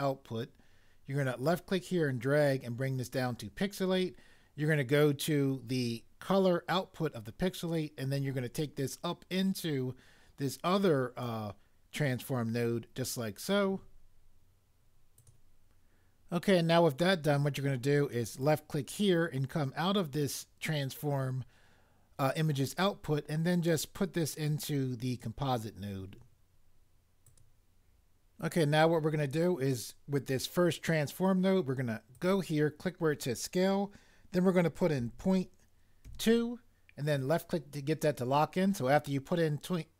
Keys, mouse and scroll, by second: 35.0 ., 36.0 2.